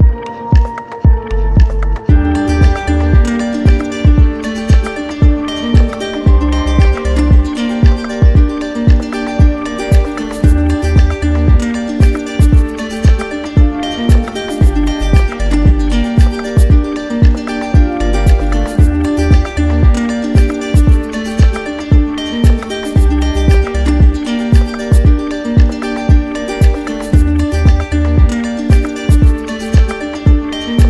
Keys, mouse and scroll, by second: 4.6 alt+click, 6.4 alt+click, 7.1 click, 8.5 alt+click, 9.2 click, 11.4-12.4 drag, 14.3 z, 15.4-16.6 drag, 18.2-19.6 drag, 18.6 ctrl+z, 20.1 click, 21.3 click, 22.3 click, 23.3 click.